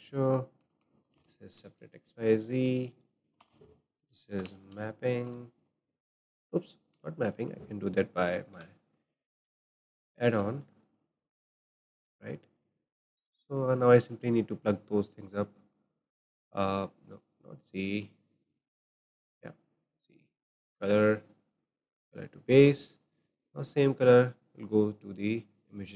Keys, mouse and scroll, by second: 3.4 shift+a, 4.8 p, 6.9 Delete, 7.2 click, 7.8 click, 8.5 ctrl+t, 9.0 drag, 9.8 Delete, 10.0 scroll down 2, 10.4-10.8 shift+middle drag, 10.8 drag, 11.7 click, 12.5 click, 13.0 click, 13.9-14.3 shift+middle drag, 14.3-16.3 scroll up 3, 16.3-17.1 drag, 18.5 click, 19.2 click, 19.9-20.8 drag, 21.5-22.4 drag, 22.4-23.4 scroll down 4, 22.8 shift+middle click, 24.6 click, 24.6-25.0 shift+scroll down 1, 25.8 click.